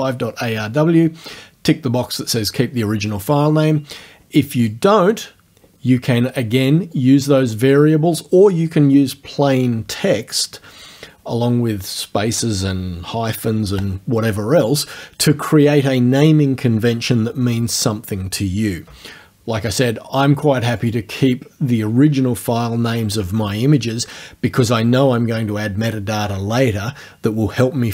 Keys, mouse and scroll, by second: 4.7 click, 7.0 click, 20.8 click.